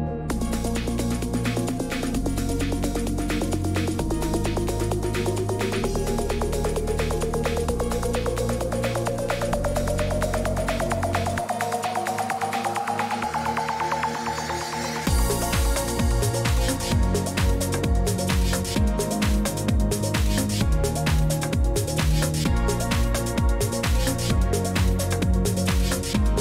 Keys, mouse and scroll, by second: 1.1 typing, 3.8-4.6 typing, 5.0 Return, 7.2 click, 8.0 Escape, 13.0 click, 14.0 click, 15.8 click, 18.4 click, 21.0 click, 21.7 scroll up 1, 21.7-23.5 scroll, 23.8-25.8 scroll.